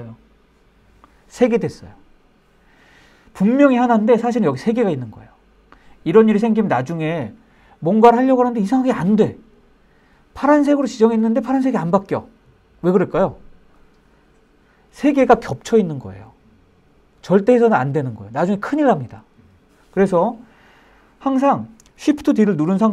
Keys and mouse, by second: 21.9 shift+d.